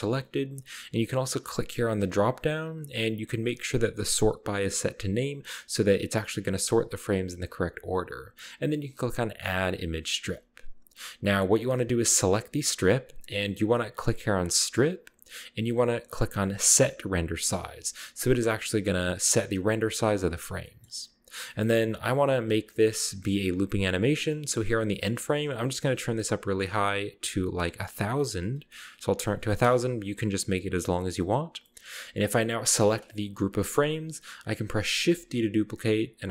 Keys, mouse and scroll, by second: 2.0 click, 9.4 click, 10.4-11.4 scroll down 1, 12.7 middle click, 12.7 g, 12.9 middle click, 13.1-13.8 drag, 14.3 click, 16.8 click, 17.5-19.3 scroll down 2, 19.3-20.2 scroll up 1, 20.2-20.7 scroll down 1, 20.7-22.2 middle drag, 20.7-21.1 scroll up 1, 21.1 scroll down 1, 21.6-24.0 scroll down 2, 23.1-23.8 middle drag, 25.1 click, 28.0-29.3 typing, 29.7 Return, 31.2-32.6 middle drag, 32.6 g, 32.9 right click, 33.5-34.5 middle drag, 35.2 shift+d.